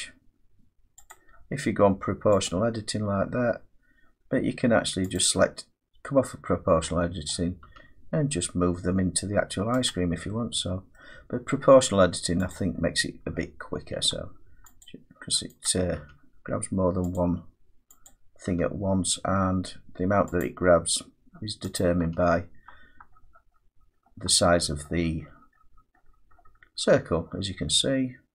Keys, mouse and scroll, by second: 1.1 click, 2.4 click, 5.1 click, 7.2 middle click, 7.6 g, 9.1-9.7 scroll, 9.8 click, 10.9 middle click, 12.5 click, 13.3 g, 14.8 click, 15.6 click, 16.0 g, 17.1 click, 18.0 click, 18.5 g, 20.4 click, 22.0 click, 22.0 g, 22.7-24.6 scroll, 25.0-25.3 scroll, 25.5 scroll down 1, 25.7-26.3 scroll down 11, 26.3 scroll up 1, 26.5 scroll down 3, 26.7 scroll up 4, 26.9-27.9 scroll down 14.